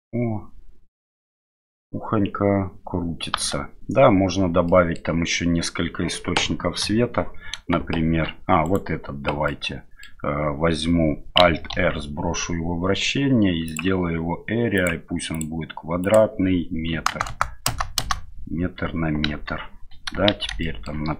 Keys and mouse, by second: 3.3 space, 4.7 middle click, 6.8 KP_7, 8.6 right click, 9.5-10.0 middle drag, 11.7 alt+r, 13.6 click, 14.8 click, 16.0-18.1 drag, 17.2 KP_0, 19.3 KP_1, 20.3 shift+z, 20.7 shift+middle click.